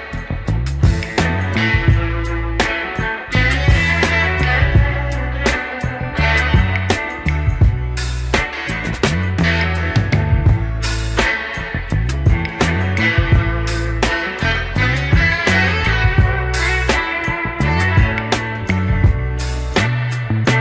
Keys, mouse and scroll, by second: 0.2 e, 3.8 s, 11.4 s, 13.6 e, 18.0 e.